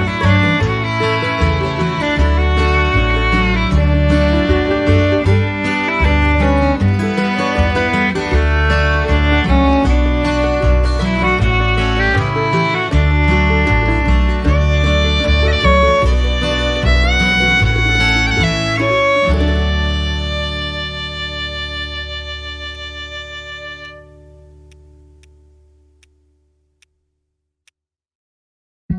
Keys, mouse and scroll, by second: 5.5 ctrl+z, 16.9 ctrl+z, 26.0 ctrl+click.